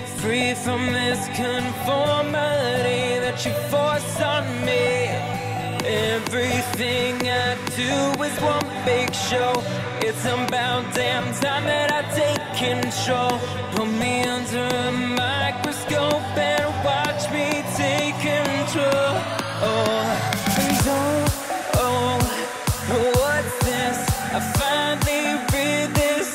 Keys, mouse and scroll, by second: 2.2-3.2 drag, 3.2 i, 5.1-8.7 drag, 12.3-16.0 drag, 18.3 click, 24.9 click.